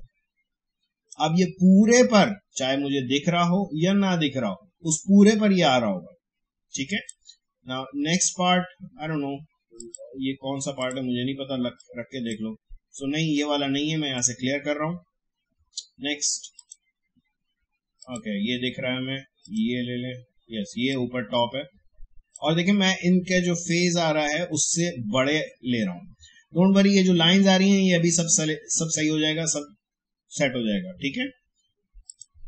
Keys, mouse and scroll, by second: 6.9 click, 9.7-14.1 drag, 16.5-27.1 drag, 32.0-32.4 drag.